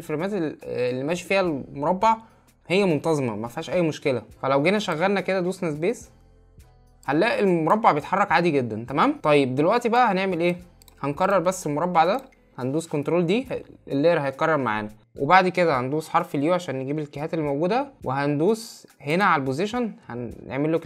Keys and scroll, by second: 13.4 ctrl+d, 15.8 u.